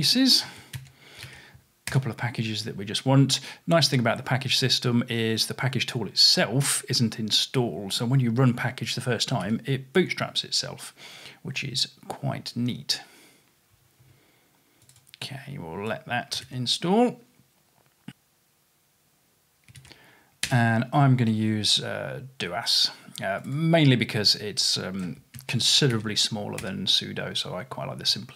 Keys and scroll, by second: 0.8 super+c, 1.2 super+v, 9.5 y, 10.0 Return, 15.1 typing, 16.4 super+c, 19.8 super+v, 25.4 super+c, 26.0 super+v.